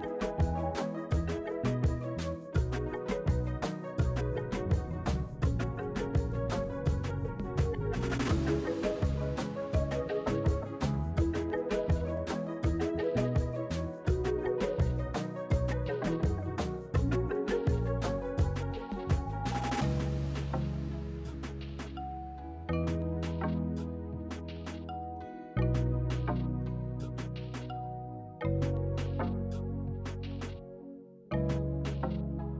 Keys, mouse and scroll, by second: 2.6 ctrl+k, 5.9 Right, 6.2 click, 6.6 ctrl+g, 7.7 ctrl+g, 8.5 ctrl+g, 10.3 ctrl+z, 11.1 click, 12.2 ctrl+g, 12.4 Right, 16.4 Down, 16.5 Left, 17.4 Down, 17.8 Left, 19.7 shift+F4, 22.1 shift+8, 22.4 BackSpace, 22.6 shift+7, 22.7 ctrl+b, 23.8 f, 24.3 r, 24.6 e, 24.9 Down, 25.2 Return, 25.7 p, 28.4 Left, 32.2 ctrl+g.